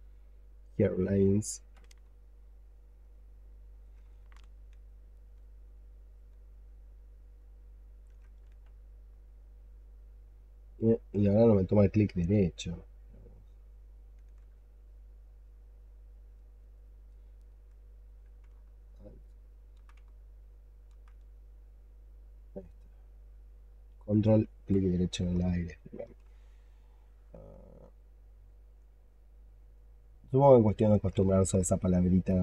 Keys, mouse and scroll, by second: 2.1 ctrl+right click, 4.5 ctrl+click, 5.5 ctrl+click, 6.4 ctrl+alt+middle click, 6.5 ctrl+alt+click, 8.8 ctrl+right click, 9.6 ctrl+right click, 9.7 ctrl+click, 10.9 ctrl+click, 11.9 ctrl+click, 12.9 ctrl+click, 15.0 ctrl+click, 16.5 ctrl+click, 17.2 ctrl+alt+middle click, 17.3 ctrl+alt+click, 18.8 alt+right click, 19.9 alt+right click, 21.2 ctrl+right click, 25.2 alt+click, 26.5 alt+click, 28.6 double click, 28.9 double click, 29.1 double click, 29.4 double click, 29.7 double click, 29.9 double click, 30.1 double click, 30.3 double click, 30.6 double click, 30.8 double click, 31.1 alt+click, 31.9 double click, 32.1 double click, 32.3 double click.